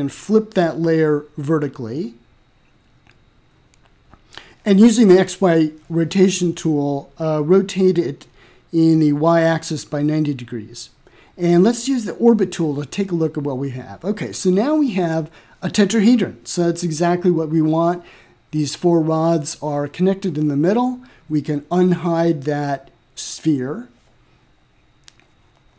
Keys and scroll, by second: 6.8-7.6 typing, 7.8 Return.